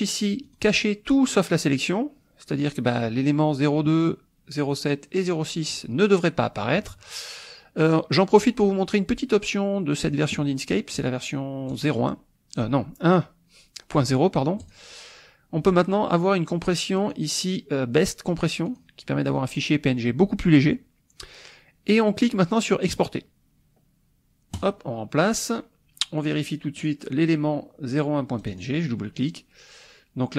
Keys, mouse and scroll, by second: 0.5 click, 10.0 click, 11.0 click, 11.8 click, 14.6 click, 17.0 click, 18.7 click, 22.9 click, 24.5 click, 26.3 click, 26.8 click, 28.4 click.